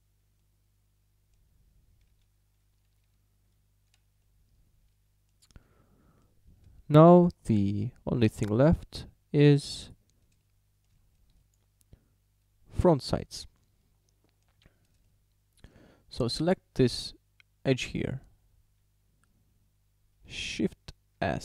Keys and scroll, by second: 3.1 Tab, 21.2 shift+s.